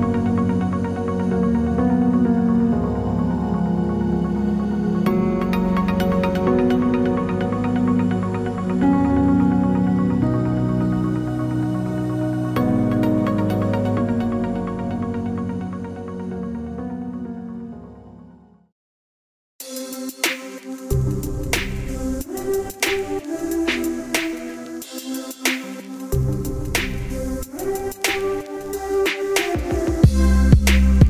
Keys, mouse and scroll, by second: 1.2 alt+click, 2.0-2.9 alt+scroll up 4, 3.4 right click, 3.9 right click, 4.3 click, 8.9 ctrl+z, 9.3 click, 10.4-10.8 alt+scroll down 2, 11.5 click, 12.9 alt+scroll down 1, 14.0 alt+scroll down 1, 14.5 alt+scroll up 1, 16.6 ctrl+alt+shift+e.